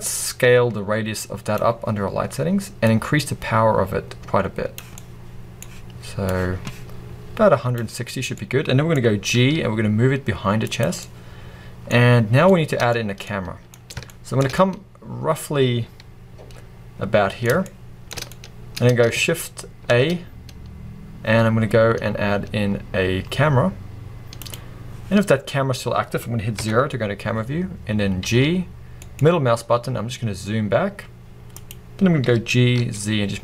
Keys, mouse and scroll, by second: 0.4-5.0 drag, 4.9 scroll up 2, 5.0-6.4 middle drag, 6.4-8.5 drag, 8.5-10.6 middle drag, 9.4 g, 10.8 click, 12.3 scroll down 1, 12.5 middle click, 13.0 scroll up 1, 13.3 middle click, 13.8-14.1 scroll down 1, 14.1 shift+middle click, 14.6 scroll up 1, 14.7-24.6 middle drag, 18.3-18.6 scroll up 2, 25.2-26.6 scroll down 2, 26.6 KP_0, 28.3 g, 31.7 click, 32.3 g.